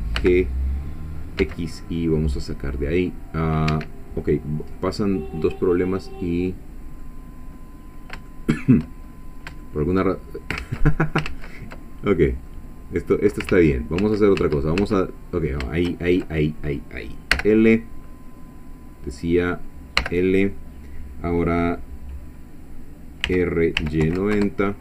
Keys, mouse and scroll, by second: 0.2 g, 1.4 x, 3.7 Escape, 4.8-7.2 drag, 7.5 scroll up 1, 8.3 shift+click, 9.1-9.4 shift+scroll up 1, 9.6 shift+click, 10.6 ctrl+z, 11.9 ctrl+middle click, 12.5-13.6 drag, 13.5 ctrl+z, 17.3 l, 20.0 l, 23.3 r, 23.8 y, 24.0 9, 24.2 0, 24.3 Return.